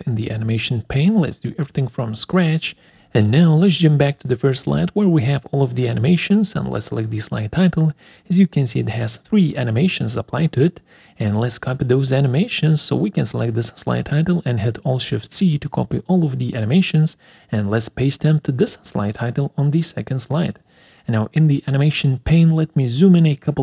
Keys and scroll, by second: 10.3 1, 14.3 alt+shift+c.